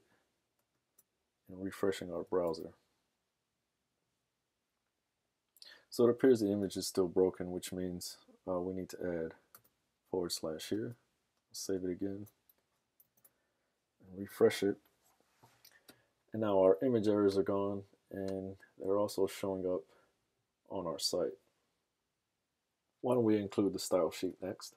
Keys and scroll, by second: 2.6 super+r, 6.8 super+Tab, 10.7 super+s, 12.1 super+Tab, 13.3 super+r, 24.3 super+Tab.